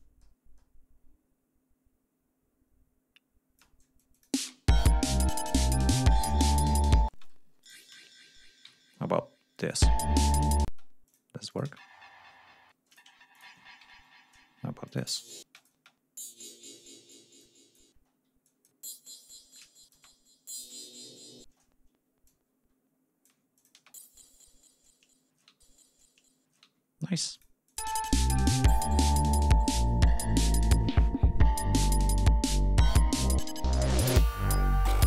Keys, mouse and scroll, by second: 4.1 ctrl+click, 4.3 ctrl+space, 4.5 ctrl+scroll up 2, 7.0 space, 7.4 e, 7.5 click, 8.6 alt+shift+Down, 9.5 click, 9.7 space, 10.6 space, 11.0 click, 11.4 click, 11.6 space, 12.7 space, 12.8 click, 13.3 alt+shift+click, 13.7 alt+shift+Up, 14.8 click, 15.0 space, 15.5 click, 16.6 click, 17.3 click, 17.8 space, 18.1 d, 18.4 click, 18.9 shift+right click, 19.6-20.9 shift+drag, 21.0 click, 21.1 space, 22.6 space, 23.4 alt+click, 24.7 alt+click, 24.9 alt+space, 26.5 space, 26.7 g, 27.3 click, 27.7 click, 27.8 space, 29.2-29.7 ctrl+scroll down 4, 29.9-30.4 ctrl+scroll up 4, 31.7 ctrl+click, 32.1-34.1 ctrl+drag.